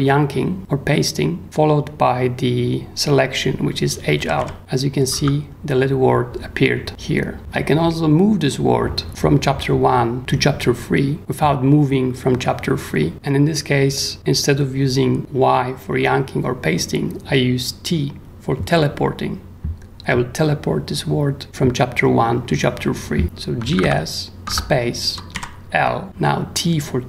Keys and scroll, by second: 1.4 y, 3.9-6.3 typing, 7.4 u, 23.4-25.3 typing.